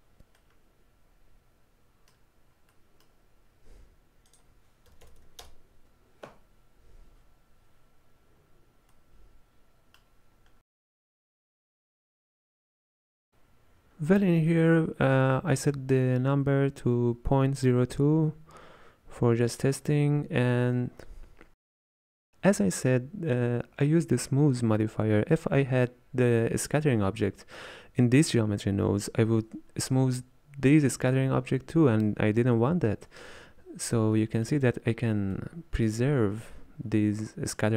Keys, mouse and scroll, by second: 0.4-2.5 middle drag, 2.5-2.9 scroll down 3, 2.9 middle click, 3.2-3.6 scroll up 1, 8.4-8.9 scroll up 3, 9.0-10.3 middle drag, 10.3-10.9 scroll down 2, 10.9-11.9 middle drag, 11.9 scroll down 1, 12.1-13.2 scroll up 3, 13.2-13.8 scroll down 1, 13.8-14.8 scroll down 1, 14.8-15.8 scroll down 1, 15.8-19.3 scroll down 1, 19.3-19.9 scroll down 1, 33.6 z, 34.2-37.7 middle drag.